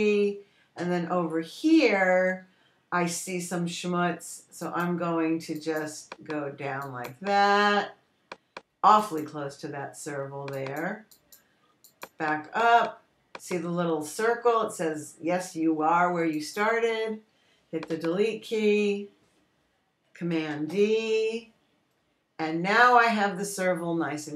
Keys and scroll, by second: 0.5 BackSpace, 19.4 BackSpace, 22.0 super+d.